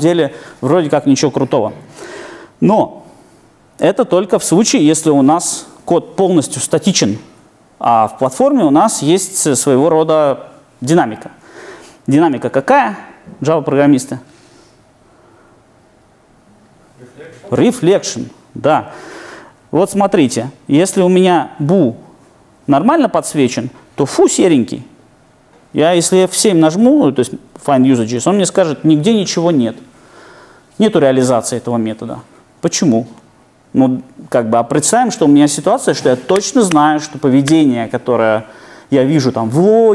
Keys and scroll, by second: 3.5 alt+super+r, 27.4 alt+F7.